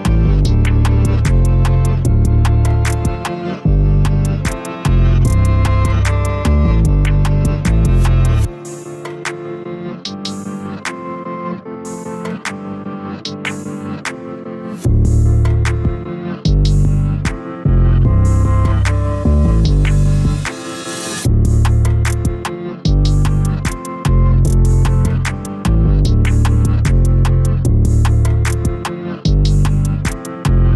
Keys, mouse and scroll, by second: 0.8 KP_1, 1.3 g, 2.9 Tab, 3.5-5.3 middle drag, 5.3 shift+a, 12.3 click, 13.7 Tab, 14.4 s, 16.9 s, 20.5 s, 23.0 KP_1, 23.8-24.1 scroll up 1, 24.7 g, 26.0 a, 26.1-26.5 scroll down 1, 26.5 middle click, 27.0-27.6 scroll up 2, 27.6 3, 27.9 click.